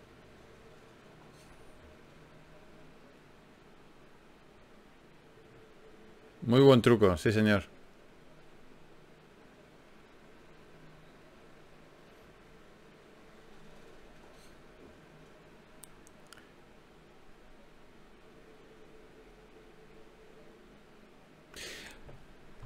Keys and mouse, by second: 1.5 KP_Divide, 3.5 a, 5.1 ctrl+n, 7.6 KP_Divide, 16.0-19.0 drag.